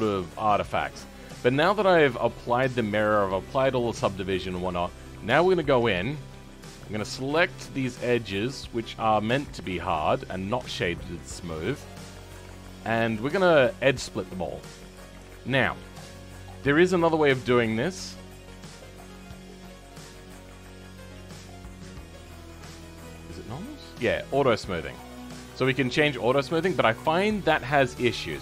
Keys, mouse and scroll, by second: 0.3 right click, 0.8-4.3 middle drag, 4.3 Tab, 4.7-6.6 scroll up 1, 6.6 click, 7.0-8.3 middle drag, 8.3 alt+click, 10.3-12.9 middle drag, 12.9 alt+shift+click, 14.0 shift+middle click, 14.7-15.7 scroll up 6, 15.7 alt+shift+click, 24.6-27.0 drag, 27.0-27.4 scroll down 6, 27.4-28.4 middle drag.